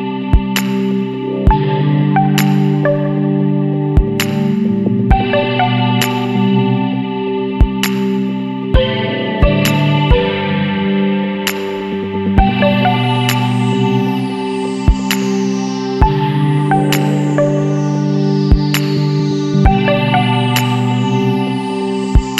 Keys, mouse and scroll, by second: 0.7 KP_6, 1.1 KP_Enter, 2.4-3.0 scroll down 2, 3.6-4.0 scroll up 2, 6.3 click, 7.4 click, 9.0 click, 11.1 click, 13.4 click, 15.0 Escape, 15.9 click, 18.0 click, 19.2 click, 20.7 click, 21.5 click.